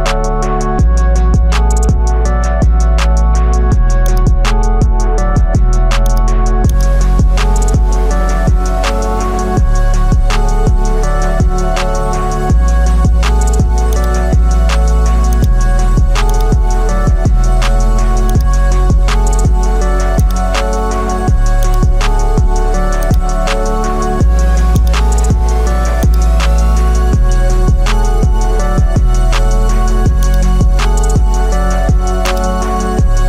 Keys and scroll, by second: 4.8 ctrl+t, 17.1 Return.